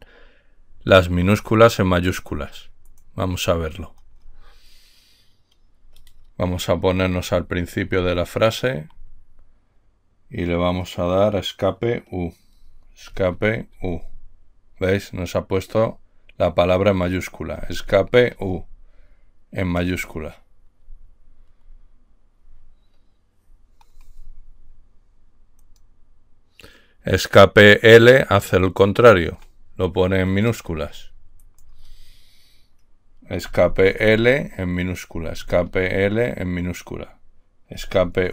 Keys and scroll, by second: 7.6 Left, 8.0 Left, 8.2 Left, 8.7-9.2 Left, 13.4 Escape, 14.0 u, 17.9 Escape, 18.6 u, 21.0 Left, 21.5 Left, 21.6 Left, 21.7 Left, 21.8 Left, 21.9 Left, 33.8 Escape, 34.3 l, 35.4 Escape, 35.9 l, 37.8 Escape.